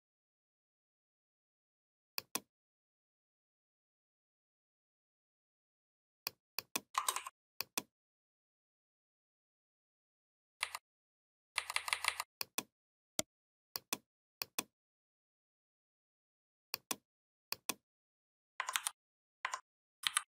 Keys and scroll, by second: 10.4 Down, 18.6 ctrl+c, 19.8 ctrl+b.